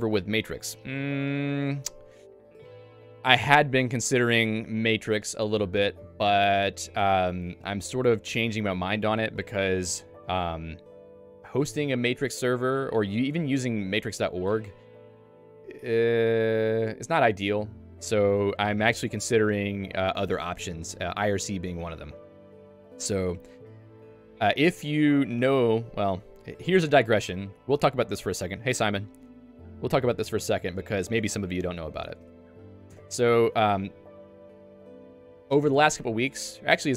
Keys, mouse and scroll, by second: 11.6 click, 12.8 click.